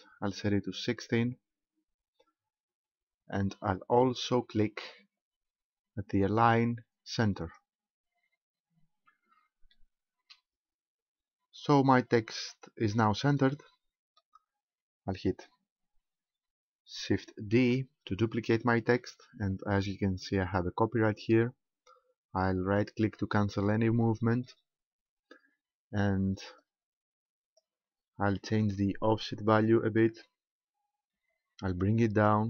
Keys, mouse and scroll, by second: 3.8-5.8 scroll down 7, 7.4 click, 9.7 shift+middle click, 11.4-11.8 scroll up 3, 13.5 middle click, 17.6 shift+d, 23.6 right click, 26.6 click, 28.6 middle click, 29.5 scroll up 2, 31.7 click, 32.2 click.